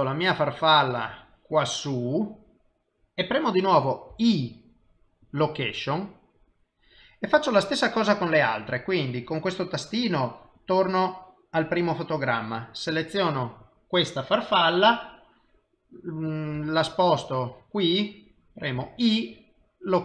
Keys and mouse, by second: 4.3 i, 10.8 click, 13.5 click, 16.0 i, 16.9 g, 19.0 i, 19.9 i.